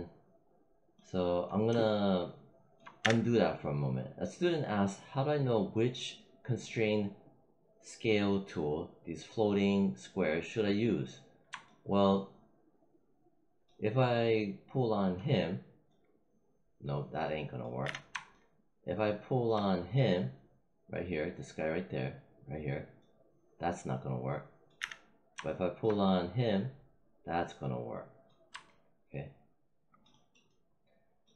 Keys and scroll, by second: 2.9 z, 17.8 z, 24.7 z.